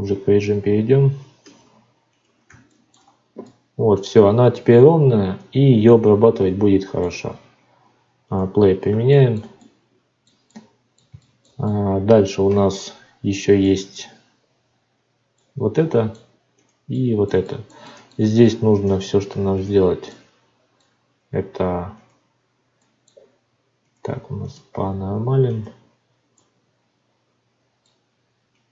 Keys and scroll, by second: 1.4 alt+v, 18.1 Tab.